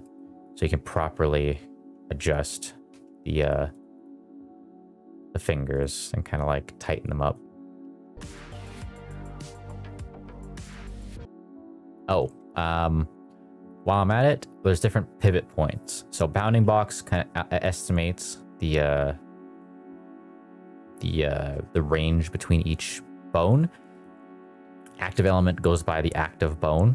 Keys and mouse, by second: 0.4 click, 0.8 r, 2.8 Escape, 3.6 click, 4.3 r, 5.0 click, 7.7 r, 8.2 middle click, 8.3 r, 8.5 z, 8.6 x, 8.8 middle click, 9.1 middle click, 9.2 shift+middle click, 9.3 middle click, 9.5 click, 9.6 middle click, 9.8 shift+drag, 9.9 r, 10.1 z, 10.8 shift+click, 11.0 r, 11.0 z, 11.2 click, 11.4 shift+middle drag, 11.8 middle click, 12.2 shift+middle drag, 13.6-23.1 drag, 23.8-26.9 drag.